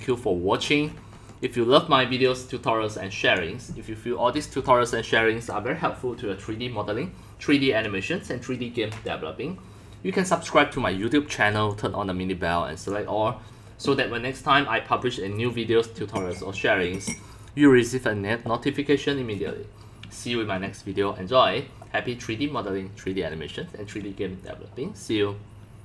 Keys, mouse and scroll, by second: 0.2 click, 0.6-1.1 scroll, 2.1 click, 2.3 middle click, 3.3 click, 11.8 click, 12.9 click, 13.5-16.5 drag, 16.7-17.9 drag, 17.9 click.